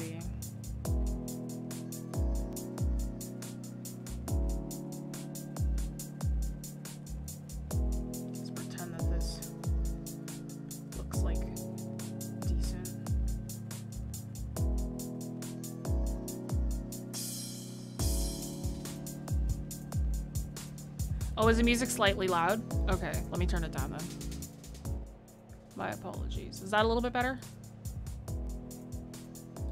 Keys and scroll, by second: 1.5 ctrl+z, 10.4 ctrl+z.